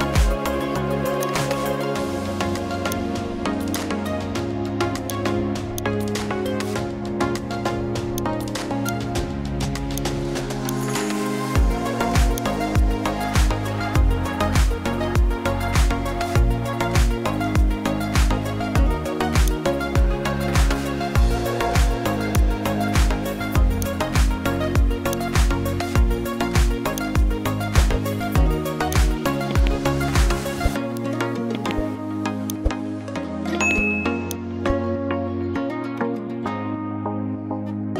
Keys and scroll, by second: 33.7 ], 34.0 ], 34.1 ].